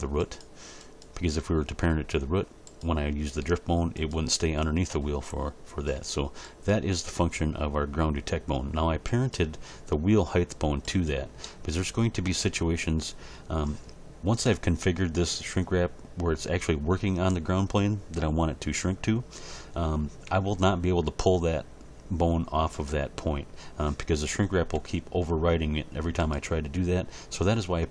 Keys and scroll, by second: 3.4 r, 20.3 g, 24.7 g.